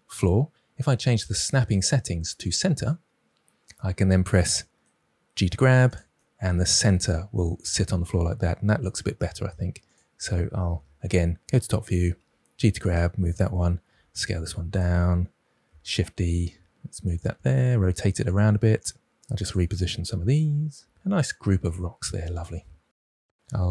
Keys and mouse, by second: 0.5-3.3 drag, 5.4 g, 5.8 drag, 10.7 KP_7, 12.1 g, 13.8 s, 15.6 shift+d, 17.1 r, 17.6 g, 18.3 click, 18.3 g, 18.9 g, 20.7 KP_7, 21.6 shift+d, 22.4 s, 22.9 r.